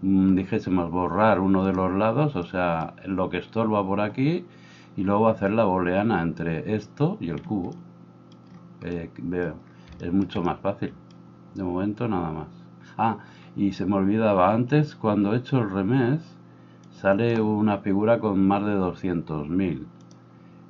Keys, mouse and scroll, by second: 1.7-16.9 middle drag, 16.9-20.6 drag.